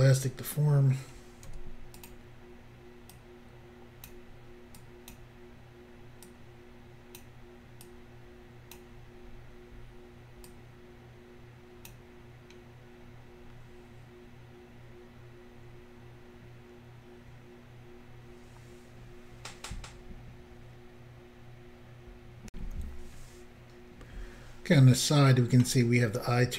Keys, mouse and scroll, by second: 1.5 f, 2.0 click, 3.2 click, 4.8 click, 6.3 click, 7.9 click, 9.4-9.8 scroll down 1, 10.5 click, 13.1-14.3 scroll down 3, 22.5 Insert.